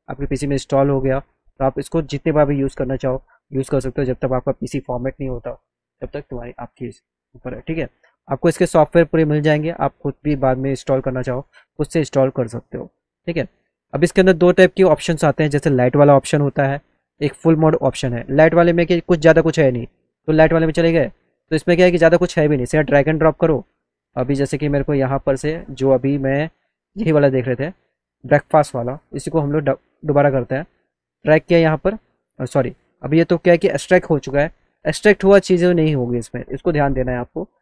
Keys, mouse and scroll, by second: 3.9 click, 13.8 click, 15.5 click, 20.0 click, 21.5 click, 23.5 click, 24.9 click, 26.2 click, 26.6 scroll down 2, 27.7 click, 28.2 click, 29.2-30.4 drag, 31.0-32.9 drag, 33.6 click, 34.9 click.